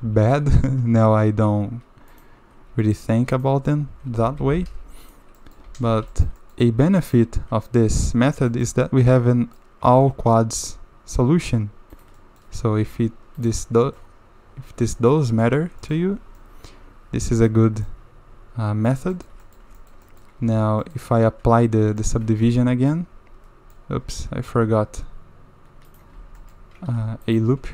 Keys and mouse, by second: 0.0 g, 2.8 shift+click, 3.9 g, 5.4 click, 5.6 a, 5.8 a, 6.1 shift+click, 6.4 click, 7.0 shift+click, 8.5 shift+drag, 8.8-9.6 drag, 9.9 ctrl+r, 12.2 drag, 12.8 ctrl+r, 13.6-14.0 drag, 14.9 drag, 15.4 drag, 15.8 shift+drag, 15.9 shift+middle click, 16.4-17.5 middle drag, 17.8-18.9 middle drag, 19.1 shift+middle drag, 19.4 middle click, 19.8 shift+middle drag, 20.0 drag, 20.4 Tab, 20.8 click, 22.0 shift+click, 22.4 ctrl+2, 22.9-23.7 drag, 24.0 Tab, 24.4 Tab, 25.9 click, 26.1 Tab, 26.4 click, 26.9 ctrl+r.